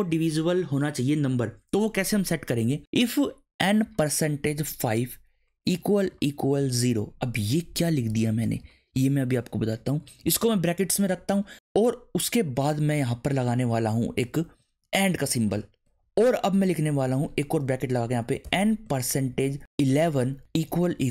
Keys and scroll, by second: 3.8-7.1 typing, 7.8 shift+Left, 10.2 shift+9, 11.8 Right, 12.9 Right, 14.8 shift+7, 16.9 shift+9, 18.4-21.1 typing.